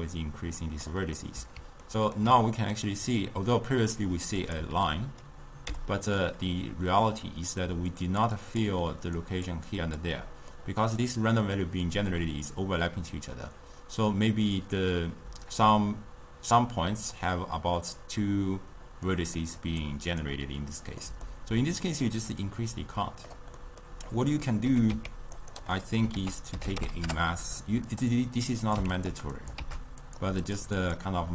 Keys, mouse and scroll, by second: 1.2-4.5 middle drag, 4.5 click, 5.8 m, 7.7-10.3 typing, 8.0 click, 8.4 click, 9.3 click, 9.8 click, 10.6-13.6 middle drag, 19.1-19.9 middle drag, 19.9 click, 21.1-22.5 middle drag, 22.5-23.6 drag, 23.6 middle click, 24.2 click, 24.8 g, 25.8 middle click, 26.2 ctrl+a, 28.7 click, 29.4 click, 30.5-31.3 drag.